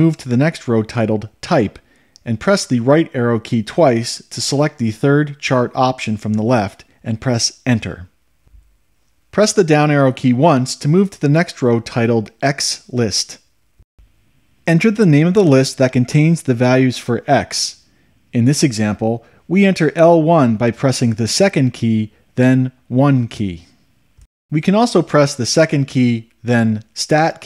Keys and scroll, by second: 3.9 Right, 5.3 Right, 7.9 Return, 10.8 Down, 22.6 1.